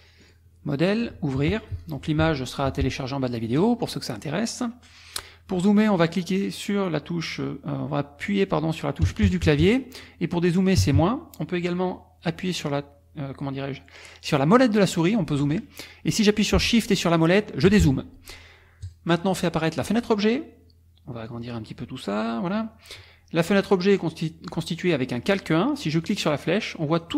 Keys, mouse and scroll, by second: 0.2 click, 1.8 click, 3.6 click, 9.0 KP_Add, 10.8 KP_Subtract, 14.8 middle click, 14.8-15.6 scroll up 1, 16.9 shift+middle click, 16.9-17.4 shift+scroll down 1, 18.8 click, 19.8 click, 21.3-22.7 drag, 24.1 click, 26.0 click, 26.9 click.